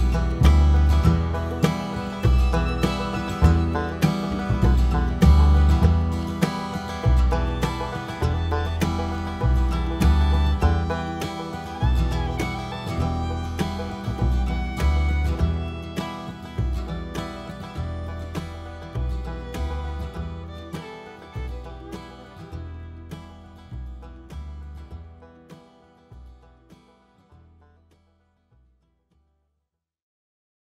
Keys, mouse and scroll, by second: 0.3 KP_Decimal, 0.5 KP_0, 0.7 scroll up 1, 1.1 alt+a, 1.5 click, 4.1 click, 6.6 click, 7.4 click, 9.7-11.2 drag, 12.2-20.1 drag, 14.0 a, 17.1 right click, 17.1 scroll down 2, 17.3-17.7 scroll up 1, 25.3 alt+a, 25.5 `, 26.3 scroll down 1, 26.5 scroll up 1, 27.2 click, 28.5 click, 28.5 KP_1, 28.7-29.2 scroll down 1, 29.5-30.0 scroll down 2, 29.6 KP_7, 30.3 g, 30.5 click, 30.6 KP_1.